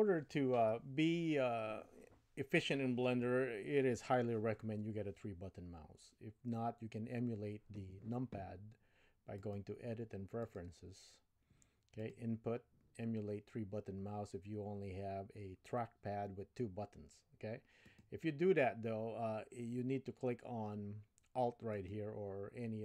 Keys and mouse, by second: 9.5-10.8 drag.